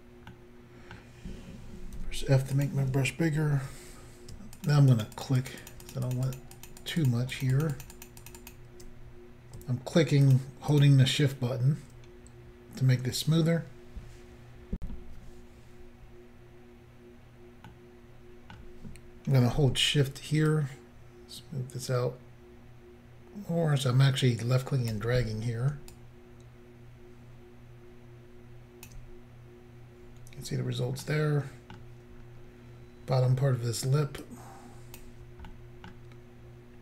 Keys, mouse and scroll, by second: 0.3 middle click, 2.0 f, 2.6 click, 4.6 shift+click, 4.7 shift+click, 4.9 shift+click, 5.0 shift+click, 5.2 shift+click, 5.3 shift+double click, 5.4 shift+click, 5.5 shift+click, 5.6 shift+click, 5.7 shift+double click, 5.8 shift+click, 5.9 shift+click, 6.1 shift+click, 6.1 shift+double click, 6.3 shift+click, 6.4 shift+click, 6.5 shift+click, 6.7 shift+double click, 6.8 shift+click, 6.9 shift+click, 7.0 shift+click, 7.1 shift+double click, 7.3 shift+click, 7.4 shift+click, 7.5 shift+click, 7.6 shift+double click, 7.7 shift+click, 7.8 shift+click, 7.9 shift+click, 8.1 shift+double click, 8.2 shift+click, 8.3 shift+click, 8.4 shift+click, 8.5 shift+double click, 10.2 shift+click, 10.3 shift+click, 10.7 shift+click, 10.8 shift+double click, 14.8 Insert, 17.7 middle click, 20.5 shift+click, 25.9 shift+click, 31.0 middle click, 32.2-33.0 scroll up 3, 34.3 click, 35.5 middle click.